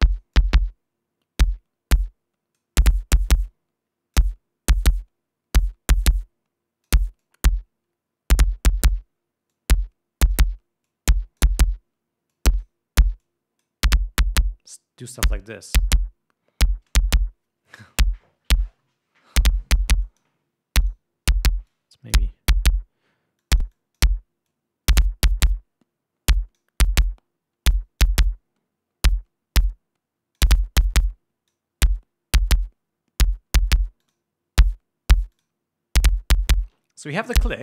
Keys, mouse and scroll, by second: 0.6-3.3 drag, 4.0 click, 6.2-7.6 drag, 7.8-9.6 drag, 10.1 click, 11.4 click, 12.9 click, 13.8 click, 15.9 click, 20.0 click, 20.6 click, 21.4 click, 22.2 click, 24.0 click, 25.0-27.3 drag, 28.3 click, 28.8-31.1 drag, 31.6 click, 34.6 click, 35.9 click.